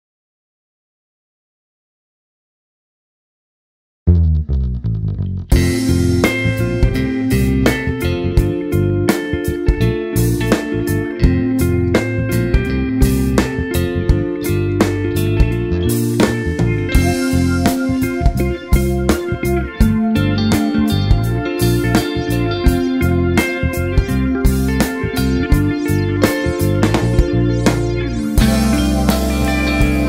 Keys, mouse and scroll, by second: 0.6 click, 2.1 click, 3.7 click, 4.4 click, 5.6 KP_1, 6.0 alt+r, 6.6 click, 6.9-10.9 typing, 7.8 click, 8.3 click, 8.6 alt+r, 9.8 click, 11.2 click, 12.0 shift+d, 12.3 click, 12.4 r, 12.6 click, 15.0 click, 15.2 KP_0, 15.6-16.0 scroll down 1, 16.0 alt+a, 16.4 click, 17.1 scroll up 1, 18.4 click, 19.0 scroll up 1, 20.6 click, 20.8 click, 24.0 scroll down 1, 24.6 click, 26.8 click, 27.8 click, 28.2 scroll up 1, 28.8 a, 29.0 `, 29.8 scroll up 1.